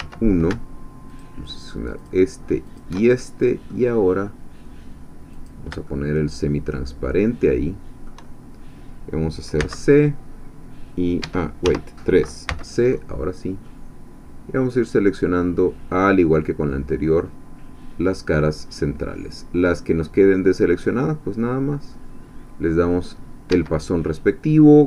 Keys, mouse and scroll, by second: 0.0 1, 1.2-2.2 alt+shift+drag, 2.8 alt+shift+click, 3.1-4.4 alt+shift+middle drag, 5.3 click, 5.8-8.2 shift+middle drag, 9.6 c, 11.2 Escape, 11.6 3, 12.5 c, 13.6-22.1 drag, 22.9 click, 23.5 Escape, 24.2 scroll down 2.